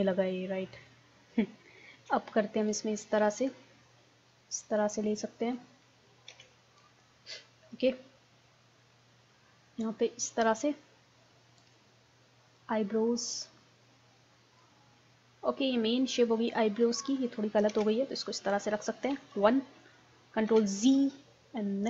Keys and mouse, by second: 0.7-2.0 middle drag, 2.0 ctrl+s, 4.3-6.2 drag, 6.3 ctrl+z, 9.9-11.4 drag, 12.6-14.4 drag, 15.0-17.7 middle drag, 17.7 ctrl+z, 19.4 KP_1, 20.5 ctrl+z.